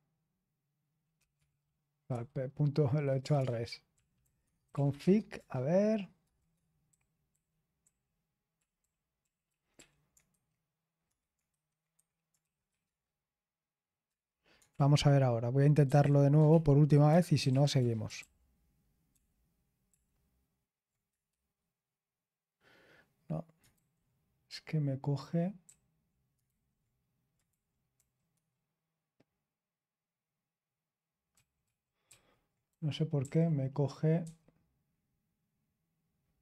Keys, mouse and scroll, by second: 1.0-11.4 typing, 11.9 Escape, 12.5-14.0 typing, 14.7 Return, 15.8-19.1 typing, 16.4 super+l, 21.3-22.1 typing, 23.7 ctrl+p, 25.6 Return, 26.4 super+h, 27.4 k, 28.3 ctrl+u, 32.0 ctrl+d.